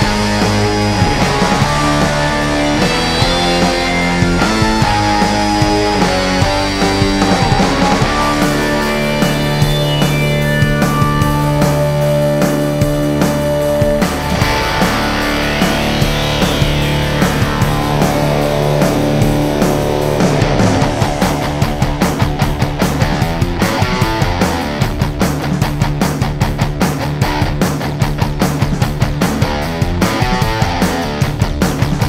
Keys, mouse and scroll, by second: 1.0 ctrl+scroll down 1, 1.8 click, 3.0 alt+shift+click, 5.6-7.9 drag, 9.9 click, 13.0 click, 13.8 click, 15.1 click, 17.1 click, 17.9 click, 19.3-32.0 drag.